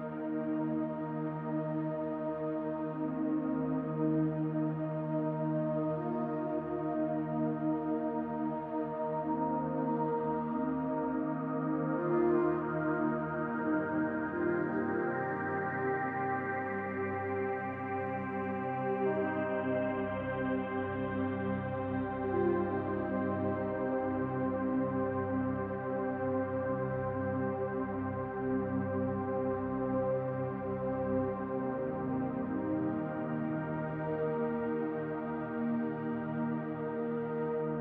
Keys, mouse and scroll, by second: 0.1 middle click, 3.2 click, 3.8 click, 5.6-6.8 scroll up 1, 7.0 click, 12.3 middle click, 13.1-13.4 scroll down 1, 13.4 middle click, 15.1 scroll down 2, 16.5 scroll up 1, 16.9 shift+middle click, 17.5-17.9 scroll down 1, 17.9 middle click, 18.9 middle click, 19.5 shift+middle click, 22.2 scroll down 1, 22.5 shift+middle click, 23.0-24.0 scroll down 1, 24.0 middle click, 24.2 shift+middle click, 24.7 middle click, 26.2 click, 26.9 middle click, 28.3 click, 29.7 shift+middle click, 32.6 shift+d, 33.3 middle click, 34.2 shift+middle click, 36.2 g, 36.9 middle click.